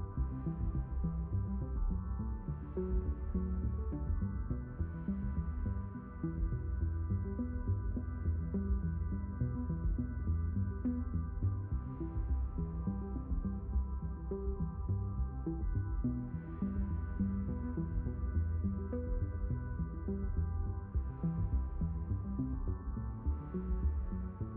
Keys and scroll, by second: 13.3 3, 13.7 Return.